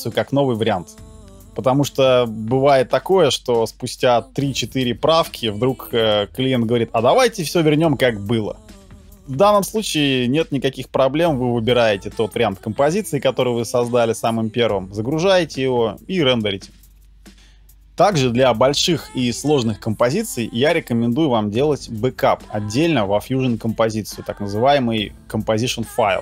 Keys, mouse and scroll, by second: 9.9 right click.